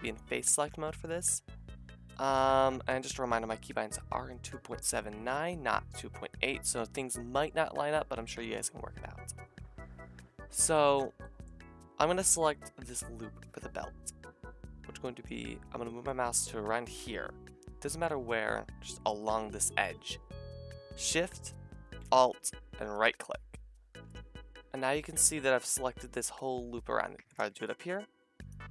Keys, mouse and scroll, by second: 10.6 shift+middle click, 16.2 middle click, 17.2-22.0 drag, 22.9 alt+shift+click, 24.5-27.3 middle drag, 28.4 alt+shift+click.